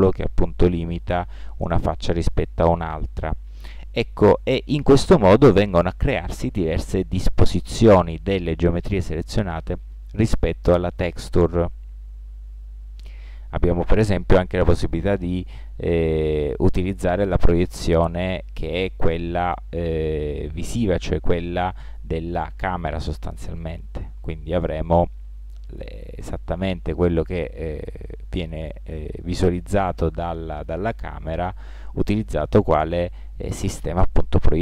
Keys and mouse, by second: 13.1 u, 17.6 middle click, 23.3 middle click.